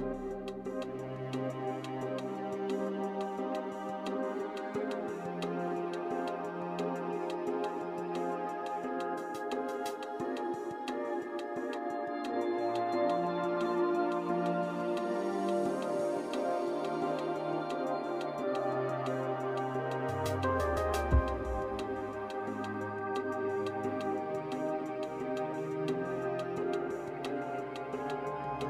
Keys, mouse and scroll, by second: 0.1 z, 0.6 middle click, 1.2 right click, 2.0 right click, 3.4 scroll down 2, 4.1 right click, 5.5 h, 6.8 KP_1, 7.6 right click, 7.9 z, 8.8-9.2 scroll up 3, 9.5 shift+middle click, 13.0 alt+h, 14.0 right click, 15.7 right click, 17.2 right click, 17.9 h, 20.4-20.7 scroll up 3, 20.8 shift+middle click, 21.7-23.5 scroll up 2, 23.5 alt+h, 24.1-26.1 scroll down 7, 26.1 a, 26.7 shift+middle click.